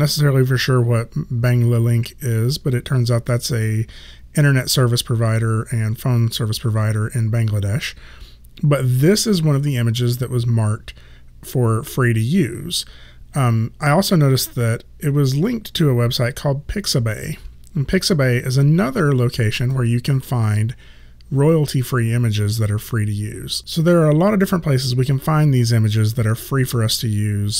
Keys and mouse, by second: 18.6 click.